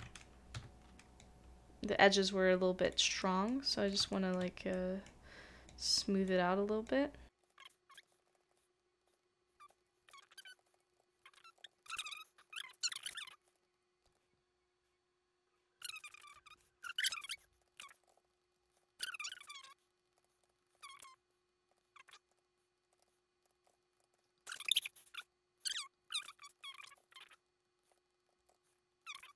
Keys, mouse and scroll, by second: 0.5 s, 3.2 middle click, 4.1 shift+middle click, 4.7 middle click, 7.4 shift+middle click, 7.5 middle click, 7.6 shift+middle click, 8.0 shift+middle click, 8.1 shift+middle click, 8.2 shift+middle click, 8.3 shift+middle click, 8.4 shift+middle click, 8.5 shift+middle click, 8.5 shift+middle click, 9.1 shift+middle click, 10.4 typing, 10.4 shift+middle click, 10.5 middle click, 10.6 shift+middle click, 10.8 shift+middle click, 11.0 ctrl+z, 11.2 middle click, 11.6 ctrl+z, 11.7 ctrl+z, 11.7 middle click, 12.0 shift+middle click, 12.1 shift+middle click, 12.5 shift+middle click, 12.6 shift+middle click, 12.7 shift+middle click, 13.0 middle click, 13.1 shift+middle click, 13.4 middle click, 13.5 shift+middle click, 14.0 shift+middle click, 17.4 shift+middle click, 17.4 middle click, 17.7 shift+middle click, 17.9 shift+middle click, 18.1 ctrl+z, 18.1 shift+middle click, 18.2 ctrl+z, 18.6 ctrl+z, 18.7 shift+middle click, 19.2 shift+middle click, 19.3 shift+middle click, 19.6 middle click, 20.1 middle click, 20.2 shift+middle click, 20.4 shift+middle click, 20.6 middle click, 20.8 shift+middle click, 21.7 shift+middle click, 22.4 shift+middle click, 23.1 shift+middle click, 23.5 shift+middle click, 23.6 ctrl+z, 23.9 middle click, 24.1 scroll up 1, 24.2-24.5 scroll down 2, 24.3 middle click, 24.5 middle click, 24.8 scroll up 1, 24.8 scroll down 1, 24.9 middle click, 26.5 middle click, 26.6 shift+middle click, 26.7 shift+middle click, 27.0 ctrl+z, 27.9 shift+middle click, 28.2 middle click, 28.5 ctrl+z, 28.6 middle click.